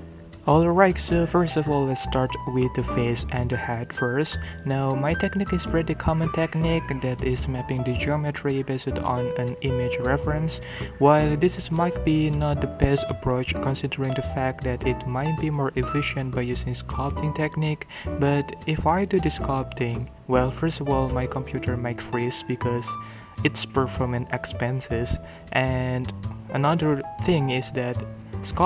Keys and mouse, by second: 0.0-8.6 typing, 1.1 shift+middle click, 2.0 shift+middle click, 2.7 shift+middle click, 5.0 ctrl+r, 5.3 shift+click, 5.5 shift+click, 5.8 shift+click, 6.0 alt+m, 6.8 shift+click, 7.1 shift+click, 7.1 ctrl+middle click, 7.3 click, 7.5 alt+m, 8.1 shift+click, 8.3 shift+middle click, 10.1-13.2 typing, 10.2 shift+click, 10.8 shift+click, 11.1 shift+click, 11.7 shift+click, 12.7 shift+middle drag, 12.9 Tab, 12.9 middle click, 13.0 middle drag, 13.1 ctrl+middle click, 13.8 click, 13.9 middle click, 14.0 click, 14.3 ctrl+KP_1, 14.3 ctrl+middle click, 14.5 shift+middle drag, 14.5 shift+z, 14.5 g, 14.8 shift+z, 14.9 click, 15.3 KP_1, 16.0 ctrl+middle click, 16.4-22.4 typing, 17.4 Tab, 17.4 shift+middle click, 17.8 ctrl+e, 20.1 click, 20.9 shift+click, 21.2 shift+click, 21.4 shift+middle click, 22.4 shift+middle click, 22.4 click, 22.6 ctrl+middle click, 22.7 shift+middle drag, 22.9 Tab, 22.9 ctrl+middle click, 23.5-27.6 typing, 23.7 Tab, 23.8 ctrl+middle click, 24.1 ctrl+middle click, 25.3 ctrl+g, 25.8 ctrl+e, 25.8 ctrl+middle click, 25.8 ctrl+z, 25.9 ctrl+z, 26.0 shift+middle click, 26.5 shift+middle click, 27.1 shift+click, 27.4 shift+middle drag, 27.5 click, 28.4 ctrl+g, 28.6 ctrl+middle click.